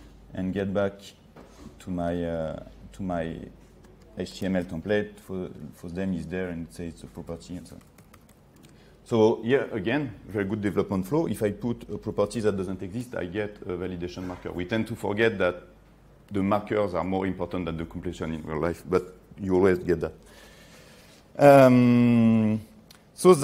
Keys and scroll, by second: 4.4 ctrl+space, 12.2 ctrl+s.